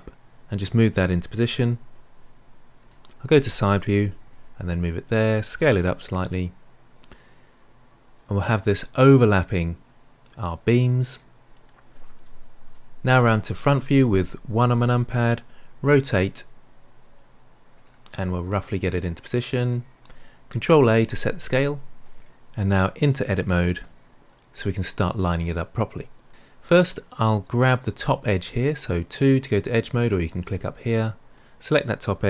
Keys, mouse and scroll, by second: 2.7 KP_3, 3.9 g, 5.7 s, 13.0 KP_3, 13.4 KP_1, 15.7 r, 18.1 g, 20.6 ctrl+a, 22.2-23.7 middle drag, 23.7 Tab, 29.1 click, 31.3 click.